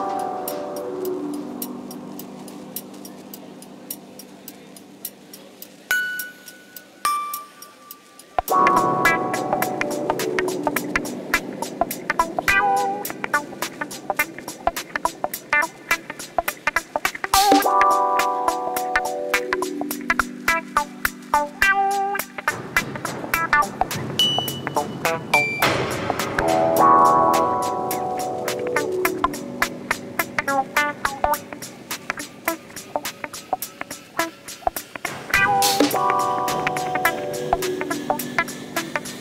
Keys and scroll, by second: 3.6-4.9 typing, 7.1 4, 12.4 3, 15.6 ctrl+d, 15.7 Escape, 20.4 ].